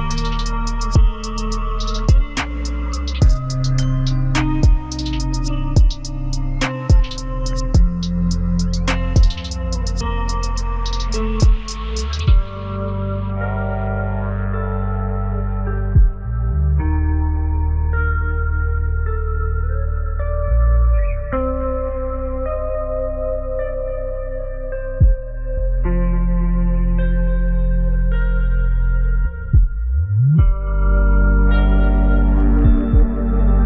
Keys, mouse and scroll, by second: 3.1 shift+click, 3.4 c, 5.8 double click, 11.1 w, 11.9 double click, 13.3 ctrl+alt+click, 16.9 typing, 18.7 ctrl+space, 19.2 ctrl+scroll down 1, 20.9 scroll up 1, 23.6 ctrl+space, 23.9 ctrl+Up, 24.4 Up, 24.5 Up, 28.2 double click.